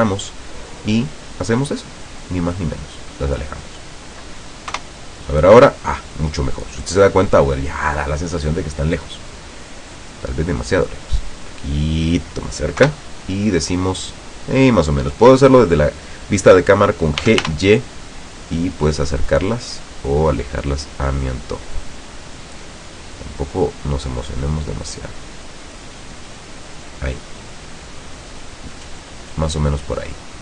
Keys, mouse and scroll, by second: 0.1-0.4 scroll down 1, 1.1-4.2 drag, 4.8 KP_0, 7.6-8.6 middle drag, 8.7 scroll down 2, 9.2-9.7 middle drag, 11.1-12.6 drag, 12.9 KP_0, 17.3 g, 17.5 y, 26.9 click, 27.4 middle click, 28.1-28.9 scroll down 2, 28.5 middle click, 29.6 scroll down 1, 30.1-30.4 middle drag.